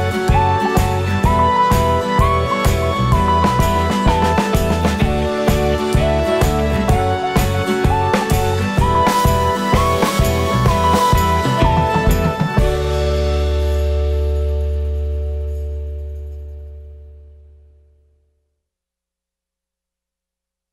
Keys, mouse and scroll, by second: 0.0 click, 0.3 ctrl+shift+click, 0.5 scroll down 1, 0.7 `, 1.5-2.1 drag, 4.2-20.7 drag, 15.3 scroll down 1, 15.9 KP_0, 19.2 scroll up 1.